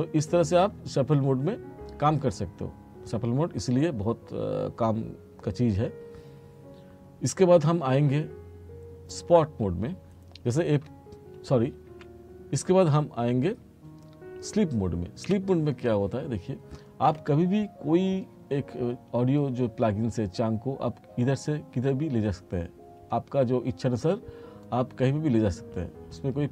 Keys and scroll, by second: 10.9 F2, 15.3 F2.